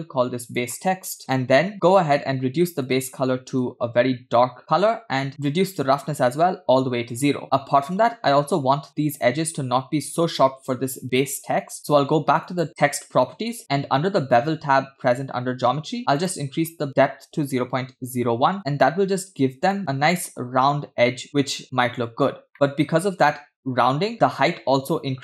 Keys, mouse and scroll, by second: 0.9 shift+click, 1.7-2.8 scroll down 2, 3.0 click, 5.2 scroll down 2, 5.5-7.2 drag, 7.4 scroll up 4, 8.1 scroll down 2, 8.9-9.3 scroll up 2, 10.7 scroll down 1, 12.5 click, 16.1-18.5 drag, 18.9-19.4 scroll up 3, 19.8 middle click, 21.2 scroll down 1, 21.2-22.2 middle drag, 22.2 scroll down 1, 22.5-23.5 middle drag.